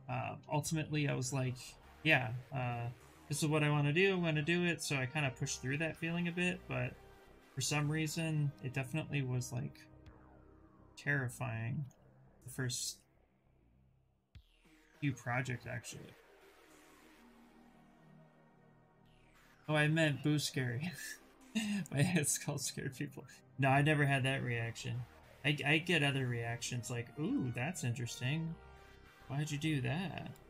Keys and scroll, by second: 22.5 w.